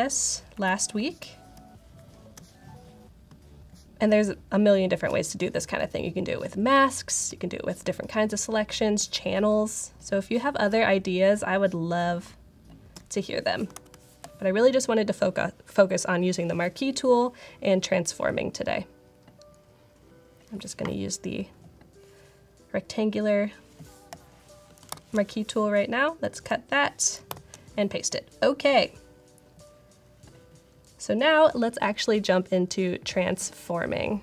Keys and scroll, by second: 1.4 alt+space, 1.9 alt+space, 13.7 super+-, 24.8 shift+super+i, 26.2 super+x, 27.2 shift+super+v.